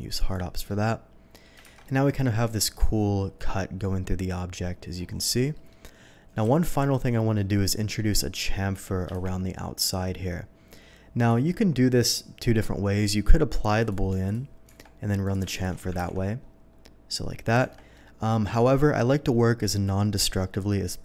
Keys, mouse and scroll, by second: 0.2 click, 0.7-1.4 middle drag, 1.6 shift+2, 1.8-2.6 middle drag, 3.8-4.9 middle drag, 5.5 middle drag, 6.5 ctrl+z, 6.9-7.3 middle drag, 7.5-7.9 middle drag, 9.1 shift+2, 11.2 click, 13.8 click, 14.2 click, 14.7 Tab, 15.2 click, 15.5 alt+click, 16.0 ctrl+b, 16.4-17.4 scroll up 1, 17.4 click, 17.7 Tab, 17.9-18.3 middle drag.